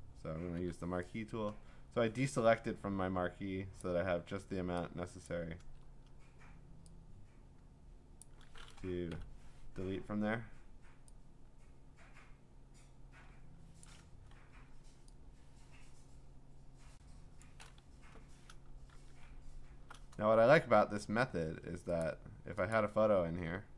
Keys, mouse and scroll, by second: 0.6 m, 3.8 click, 5.3 click, 5.6 ctrl+z, 8.2 click, 9.1 Delete, 13.8 click, 14.5 Delete, 17.4 click, 17.9 Delete, 18.9 ctrl+d, 19.3-19.9 scroll, 21.1 scroll, 21.1 middle click, 21.3 middle click, 22.0 click, 22.7 click.